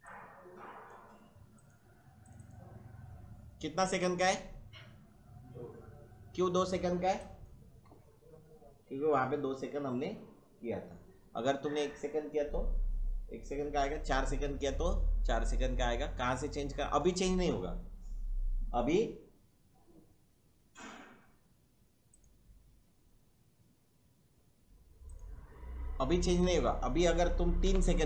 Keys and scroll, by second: 27.7 3.